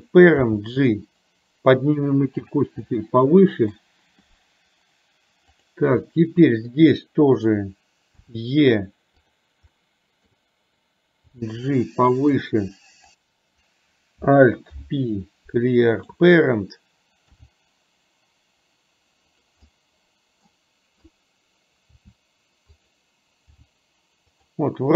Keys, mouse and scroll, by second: 0.4 g, 2.9-3.9 middle drag, 6.1 middle click, 8.4 e, 9.9 middle click, 14.9 alt+p, 17.5 g, 19.9 middle click, 22.0 r, 23.6 g.